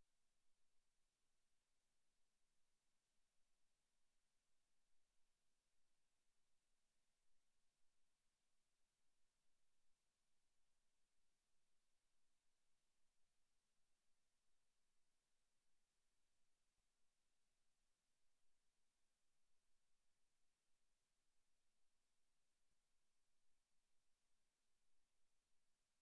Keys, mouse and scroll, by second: 0.7 alt+m, 3.4 a, 5.0 ctrl+r, 6.1 click, 6.3 Tab, 6.9 middle click, 8.7 Tab, 9.8 alt+shift+right click, 10.2 a, 10.6 alt+shift+right click, 11.1 a, 11.4 scroll up 4, 12.0 shift+middle click, 13.4 alt+shift+right click, 14.0 s, 15.1 click, 15.4-15.7 scroll down 5, 16.2 middle click, 16.8 Tab, 18.2 Tab, 18.8 s, 19.8 click, 19.8 a, 20.3 alt+shift+right click, 21.0 a, 21.4 alt+shift+right click, 23.5 Tab, 25.2 Tab, 25.8 a.